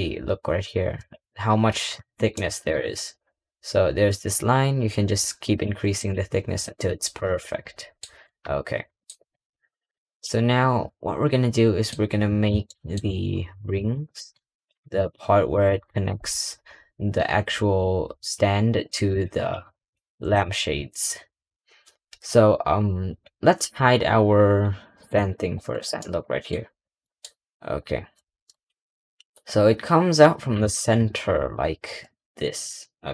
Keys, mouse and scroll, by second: 1.3-1.9 scroll up 3, 1.9-2.2 scroll up 1, 2.2 middle click, 5.4-6.7 drag, 7.7-8.1 middle drag, 8.9 middle click, 9.0 scroll down 2, 9.3 middle click, 11.9 middle click, 12.7 shift+middle click, 13.0-13.7 scroll up 1, 13.7 click, 14.0 Tab, 14.4 click, 14.7 g, 16.1-16.8 scroll down 4, 16.8 middle click, 17.3 scroll up 1, 18.1 g, 19.0 click, 19.2 g, 20.2 click, 20.4 g, 24.9 h, 25.9 shift+middle click, 26.3 middle click, 26.9-28.4 middle drag, 28.4 click, 32.8 scroll down 1.